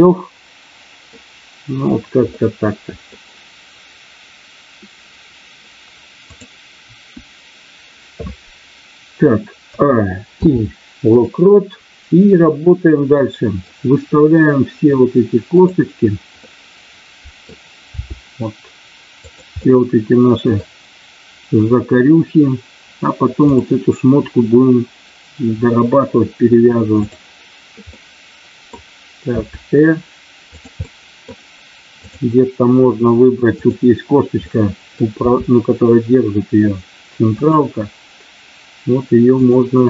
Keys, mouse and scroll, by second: 2.2-3.0 scroll up 1, 6.8 KP_1, 9.7 a, 10.3 i, 13.1 middle click, 15.6 click, 16.3-17.5 middle drag, 18.0 r, 19.2 click, 19.6 middle click, 27.8 middle click, 29.3 r, 30.6 click, 32.1 click, 33.4 click, 34.4 middle click, 35.2 r, 37.4 click, 39.3 click.